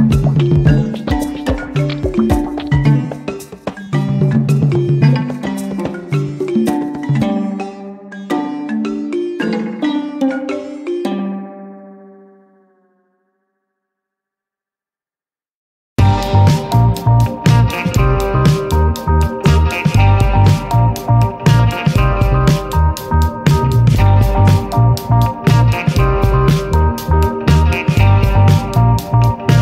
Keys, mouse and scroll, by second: 2.2 click, 4.9 shift+F6, 15.0 click, 16.6-19.5 drag, 20.5 click, 22.1-25.6 drag, 26.5 click, 27.8-29.6 drag.